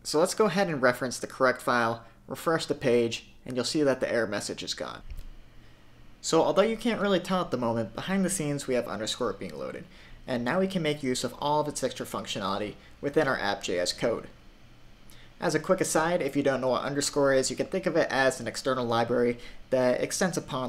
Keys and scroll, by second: 1.2 super+r.